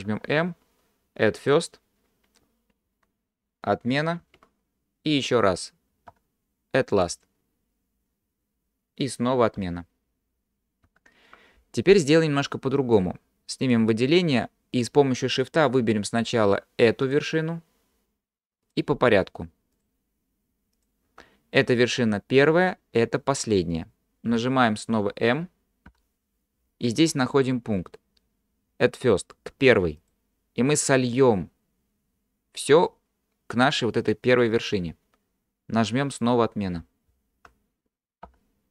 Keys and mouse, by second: 0.1 m, 4.3 ctrl+z, 6.1 m, 10.9 ctrl+z, 12.4 middle click, 13.7 click, 25.9 m, 37.1 ctrl+z, 38.3 m.